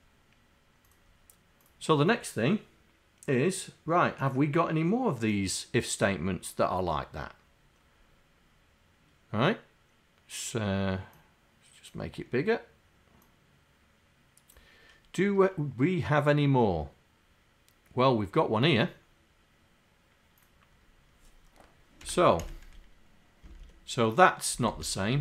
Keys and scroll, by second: 14.2 F5, 24.7 Up, 25.1 Right.